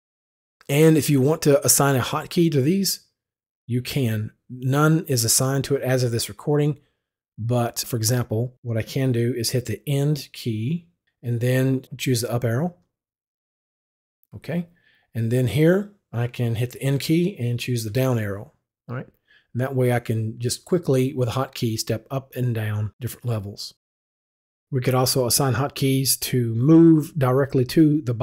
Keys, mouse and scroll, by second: 12.7 Up, 16.8 Up, 16.9 End, 17.9 End, 18.4 Down.